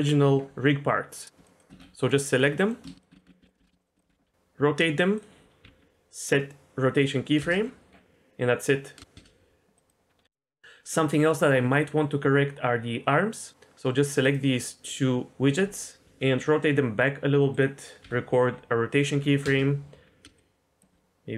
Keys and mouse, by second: 1.1 click, 1.4 shift+drag, 1.7 ctrl+z, 2.0-2.4 drag, 2.4 middle drag, 3.1 ctrl+shift+z, 3.1 shift+click, 4.1 KP_Decimal, 4.2 r, 5.6 i, 7.4 space, 9.8 click, 10.3-13.5 shift+middle drag, 13.5 click, 16.0 r, 17.5 click, 18.0 i, 19.4 space, 20.4 click, 20.9 r.